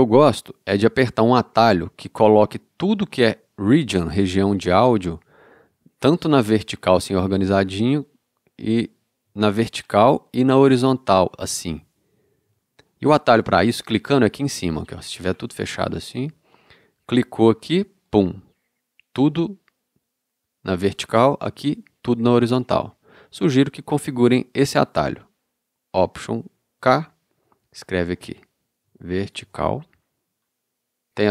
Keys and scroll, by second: 26.8 alt+k, 28.6-29.5 typing.